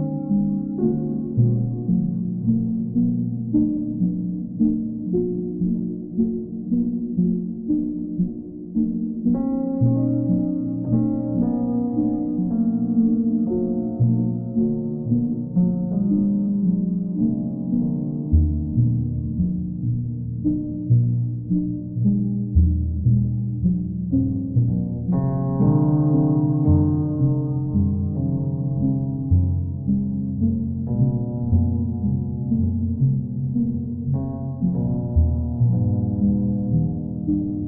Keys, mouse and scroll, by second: 0.7 click, 2.8-4.0 drag, 5.4-6.5 drag, 6.5-8.3 right drag, 9.2 right click, 14.6 click, 15.6 alt+right click, 18.1 right click, 18.9 shift+right click, 19.6 alt+right click, 24.2 click, 24.8 click, 26.2 right click, 26.7 alt+right click, 28.2 q, 32.1 click, 32.8 alt+click, 33.7 click, 34.2 alt+click, 35.5 alt+click.